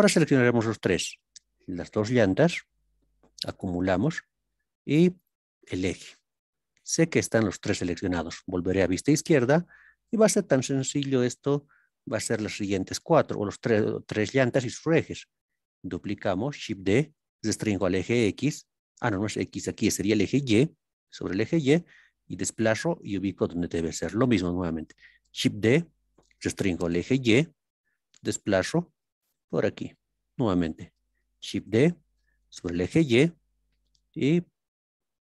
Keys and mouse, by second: 6.7-7.9 middle drag, 8.7 ctrl+KP_3, 10.6-11.2 shift+drag, 17.7 x, 22.9-24.9 drag, 26.9 y, 29.2 click, 32.5 y.